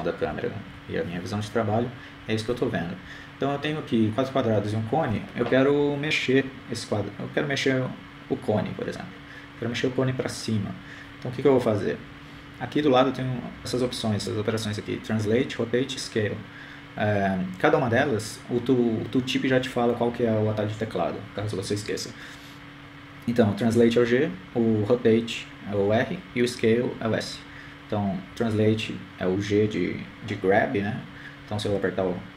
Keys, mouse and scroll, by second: 1.4-3.7 typing.